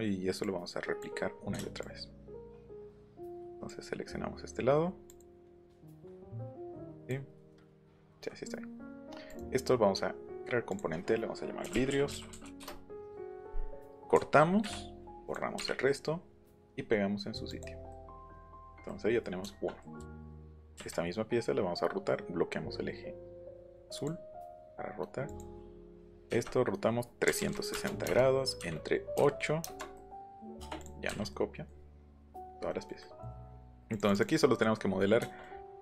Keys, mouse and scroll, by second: 0.4 click, 1.8 ctrl+shift+click, 3.2 ctrl+shift+click, 5.1 ctrl+shift+click, 6.7 ctrl+click, 9.3 right click, 10.7 click, 11.4-12.8 typing, 14.1 ctrl+x, 14.6 Escape, 15.3 click, 16.6 click, 17.5 click, 17.9-19.2 middle drag, 20.0 q, 20.7 Up, 24.0 click, 25.3 click, 27.3 KP_3, 27.4 KP_6, 27.7 KP_0, 28.1 KP_Enter, 28.6 KP_Divide, 29.1 KP_8, 30.8 click, 33.9 click, 34.0 click, 34.2 click.